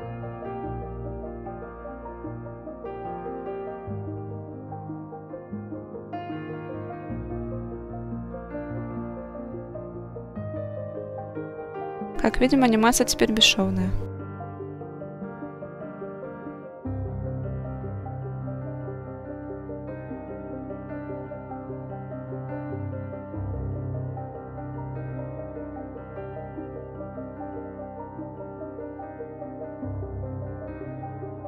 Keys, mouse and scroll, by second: 2.1 click, 2.9 click, 13.4-14.4 drag, 16.9-17.9 drag, 20.2 click, 21.3 click, 22.0 click, 23.1 click, 25.3 click, 26.3 click, 29.5-30.8 scroll down 3, 29.9-30.8 scroll up 1, 30.8 click, 30.8-31.2 scroll up 1.